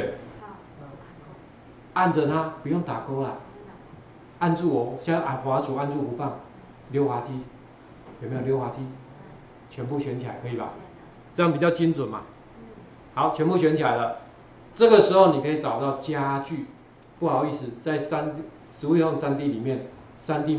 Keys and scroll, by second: 12.2 ctrl+4.